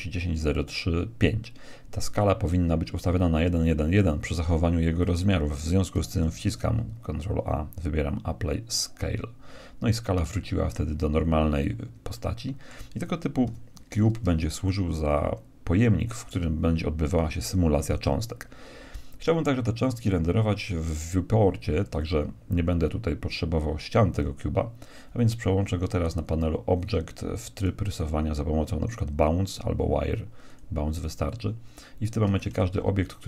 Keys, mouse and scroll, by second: 6.3 ctrl+a, 12.1-13.9 middle drag, 13.4 KP_1, 14.6-16.6 middle drag, 27.5-29.9 drag, 32.5 shift+a.